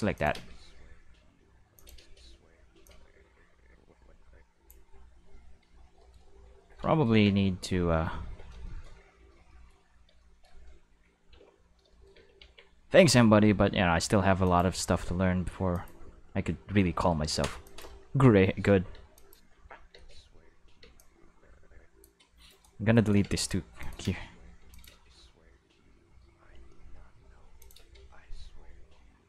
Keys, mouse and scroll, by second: 0.2 click, 0.3 space, 1.7 space, 1.8 click, 2.0 space, 2.7 space, 2.9-4.7 drag, 5.4 middle click, 5.7 middle click, 6.1 shift+middle click, 7.1 Tab, 8.2 q, 9.1 middle click, 9.5 shift+middle click, 10.2 shift+middle click, 10.9 a, 11.3 q, 12.0 middle click, 12.2 q, 12.4 Tab, 14.5 click, 15.7 click, 17.7 click, 18.3-20.8 typing, 19.2-19.6 drag, 21.0-22.0 drag, 22.5 right click, 22.9 shift+right click, 23.2 x, 23.4 click, 23.8 click, 24.0 space, 24.6 space, 24.7 click, 24.9 space, 27.4 space, 27.6 click, 27.8 space.